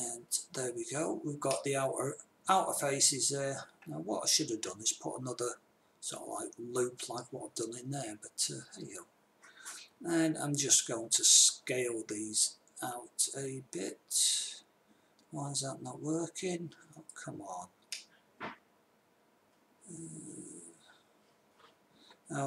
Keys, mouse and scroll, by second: 2.0-3.6 drag, 10.3 s, 18.4-19.9 middle drag.